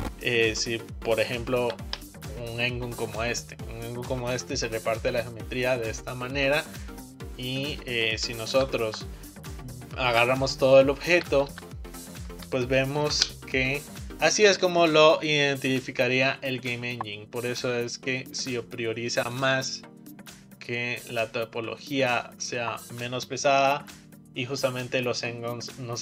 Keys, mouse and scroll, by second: 1.7 ctrl+t, 6.4-6.8 scroll down 2, 6.8-8.6 middle drag, 8.6 ctrl+z, 10.2 Tab, 11.2 Tab, 11.6 a, 13.1 ctrl+t, 13.9 middle click, 18.0-19.4 middle drag, 19.4-20.8 drag, 20.8-23.9 middle drag.